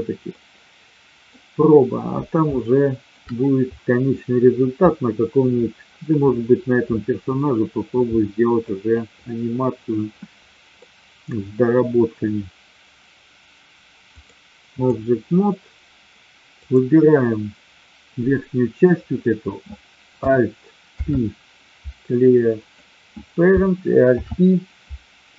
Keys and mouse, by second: 0.3-1.3 middle drag, 2.6 shift+middle click, 10.8 middle click, 14.0 click, 20.8 alt+p, 24.0 alt+p.